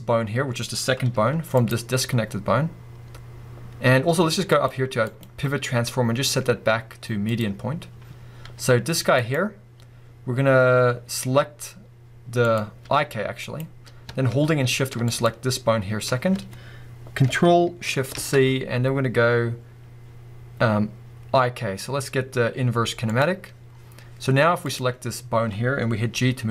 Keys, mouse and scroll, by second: 0.2-1.1 scroll up 2, 1.1 g, 1.7 right click, 4.5 click, 8.4 click, 8.4 g, 9.3 right click, 12.5 click, 12.9 g, 13.6 right click, 15.1 shift+click, 18.2 ctrl+shift+c, 24.0-24.6 scroll down 2, 24.6 click, 26.1 g.